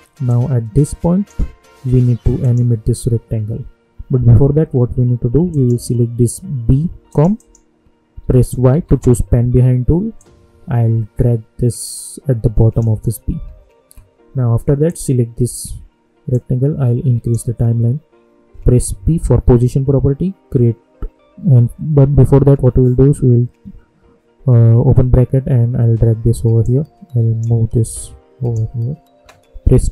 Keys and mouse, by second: 0.2-2.4 drag, 5.4 click, 8.7 y, 10.1-19.4 drag, 19.4 p, 24.7 [, 26.6 click, 27.2-29.9 drag.